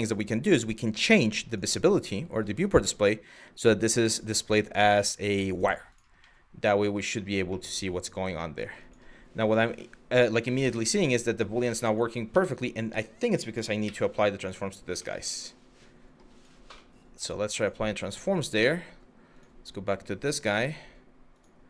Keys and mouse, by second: 1.1 click, 2.3 click, 3.7-5.3 drag, 6.0-6.5 middle drag, 6.6 click, 7.2-8.3 middle drag, 8.5 click, 9.0 Tab, 9.5 middle click, 10.4 middle click, 12.0 Tab, 13.5 ctrl+a, 14.7-15.8 middle drag, 16.0 click, 16.4-16.8 middle drag, 20.9 click.